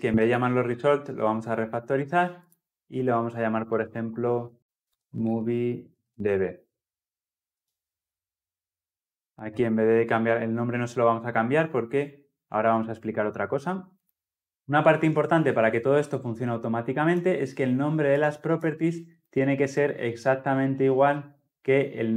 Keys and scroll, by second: 2.4 shift+F6.